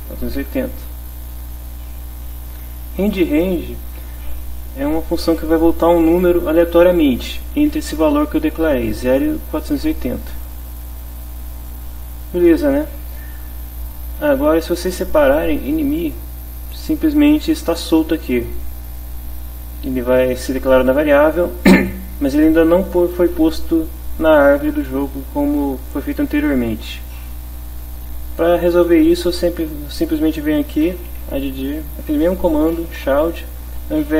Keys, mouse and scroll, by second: 0.0 4, 0.2 8, 0.4 0, 3.3 click, 4.2 click, 10.7 click, 11.7 click, 15.4 click, 18.6 click, 19.0 click, 26.9 Tab, 31.0 a, 31.2 d, 32.6 shift+-, 33.0 Return.